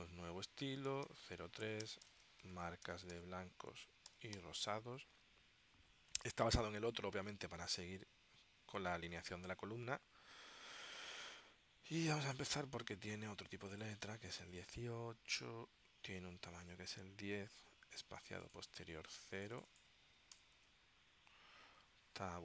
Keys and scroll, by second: 0.8-3.3 typing, 4.5 shift+r, 20.5 0, 20.7 Tab.